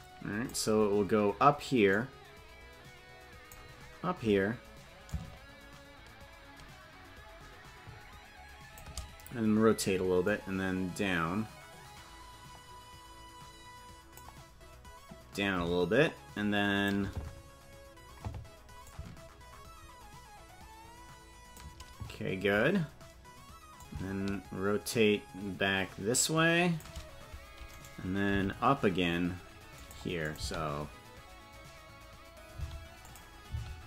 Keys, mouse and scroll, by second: 1.9-3.5 drag, 5.0-8.8 drag, 10.2-14.2 drag, 15.3-16.9 drag, 17.5-18.5 scroll down 3, 18.8-21.6 drag, 23.7-26.8 shift+drag, 27.7 right click, 28.2 g, 30.2 click, 30.4 space, 32.7 space, 33.1 click, 33.5 space.